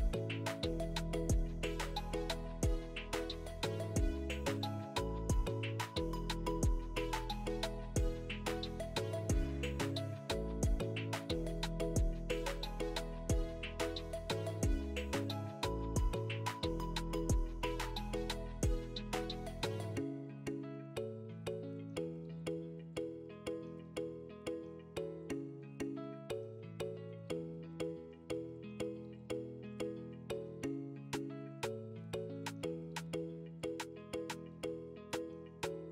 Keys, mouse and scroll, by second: 1.3 Tab, 1.8 middle click, 2.8 scroll up 1, 2.9 shift+middle click, 3.2-4.5 scroll down 1, 7.3 shift+middle click, 8.3 r, 10.1 middle click, 10.8 s, 15.3 KP_1, 16.2 scroll up 3, 16.4 shift+middle click, 17.0 click, 17.8 scroll up 4, 18.1 shift+middle click, 18.5 scroll up 3, 18.7 shift+middle click, 19.2 s, 20.8 click, 22.3 5, 26.5 click, 28.7 click, 31.9 click, 34.3-34.6 scroll up 3, 34.5 shift+middle click.